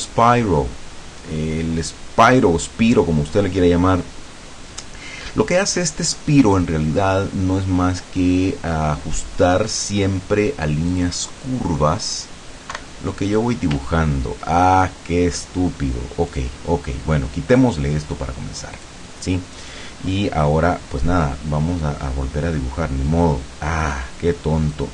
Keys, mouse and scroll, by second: 10.9 click, 12.7 Delete, 14.0 ctrl+scroll down 2, 14.6 ctrl+middle click, 16.3 click, 17.6 click, 18.8 click, 23.9 click, 24.8 click.